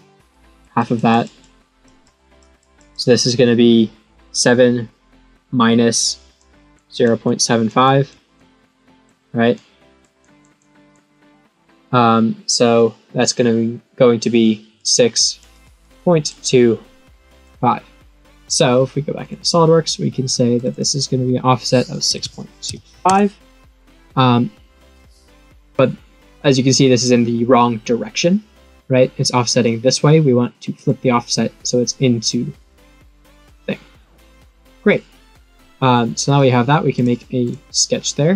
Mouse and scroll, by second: 0.3 click, 0.7 click, 1.0 click, 1.4 click, 2.0 click, 2.5 click, 2.9 click, 6.3 click, 6.9 click, 7.2 click, 7.8 click, 8.3 click, 9.5 click, 10.1 click, 10.5 click, 14.7 click, 15.5 click, 15.8 click, 16.4 click, 19.1 click, 20.5 click, 24.9-26.5 scroll up 1, 26.5-27.8 scroll up 1, 30.7 click, 34.6 click, 35.3-36.0 scroll up 1, 36.0-36.3 scroll up 1, 37.4 click.